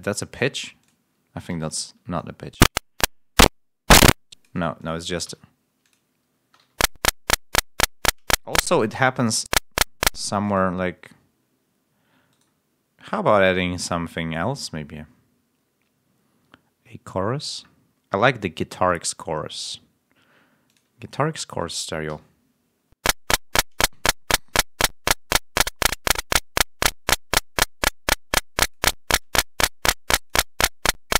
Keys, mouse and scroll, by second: 1.8 e, 5.2 l, 6.2 space, 6.5 l, 8.4 ctrl+scroll up 2, 8.6 ctrl+space, 9.2 space, 10.0 space, 17.3-17.7 scroll down 2, 22.0 l, 23.7 click, 24.7 click, 25.8-28.8 drag, 29.1-30.4 drag, 30.5 click.